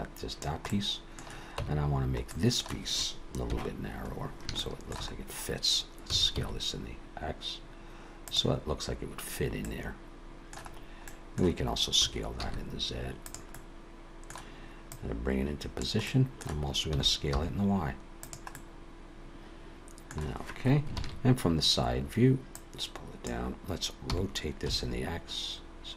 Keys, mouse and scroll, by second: 0.7 middle click, 1.6 Tab, 2.3 middle click, 3.5 KP_1, 4.0-4.6 scroll up 3, 4.6 shift+middle click, 5.1-6.1 scroll up 1, 6.1-7.2 scroll up 1, 6.1 s, 9.6 middle click, 10.7-12.0 scroll down 3, 11.1 middle click, 12.0 s, 13.5 middle click, 14.9 click, 16.0 middle click, 16.9 s, 18.5 middle click, 21.0 ctrl+KP_3, 22.5 click, 24.1 r.